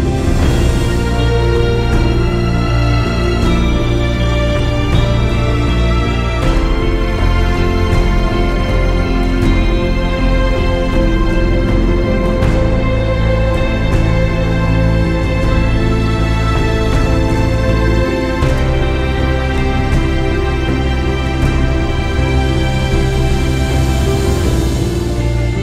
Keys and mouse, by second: 0.6 click, 1.2 click, 2.3 shift+click, 4.4 ctrl+g, 5.3 ctrl+shift+{, 5.3 [, 6.5 ctrl+z, 7.0 click, 7.5 click, 8.9 ctrl+g, 9.5 click, 10.0 click, 10.9 ctrl+shift+[, 11.4 click, 11.9 space, 12.1 click, 12.3 space, 13.7 click, 14.6 click, 15.9 click, 17.3 ctrl+g, 18.5 alt+click, 19.8 click, 20.1 space, 20.5 click, 21.5 click, 23.1 ctrl+shift+g, 23.7 click, 24.4 click, 24.5 Delete.